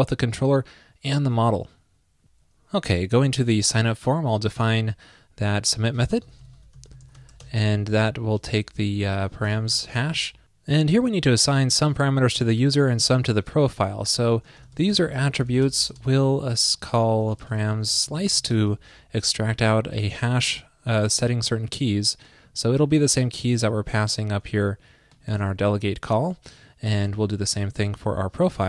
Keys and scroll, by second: 24.1 super+c, 25.3 super+c, 25.4 super+v, 27.1 ctrl+shift+d.